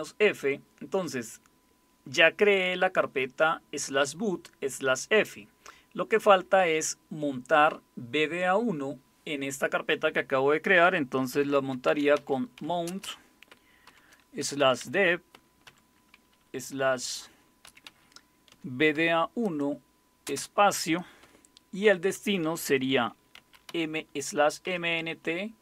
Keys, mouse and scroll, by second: 11.3-12.8 typing, 13.9-15.6 typing, 17.6-18.9 typing, 20.2 typing, 21.8 typing, 23.3-25.6 typing.